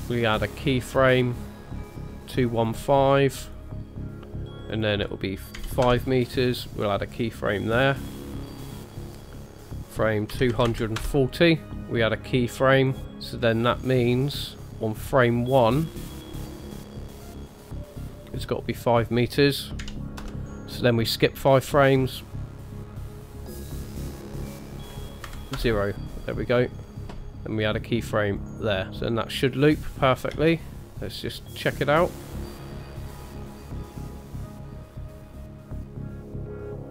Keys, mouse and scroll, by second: 0.5 click, 1.2 shift+middle click, 2.3 click, 2.5 click, 2.8 click, 3.0 click, 3.4 click, 4.7 click, 6.5 right click, 8.3 click, 12.7 click, 13.4-14.0 scroll down 2, 14.0-14.7 scroll down 3, 14.7 ctrl+middle click, 14.7 scroll up 2, 16.3 click, 19.0 click, 20.6 click, 22.4 click, 22.7 click, 22.9 click, 23.4 click, 23.6 click, 24.6 click, 26.8 middle click, 28.4 click, 28.9-29.6 scroll down 2, 30.3 space.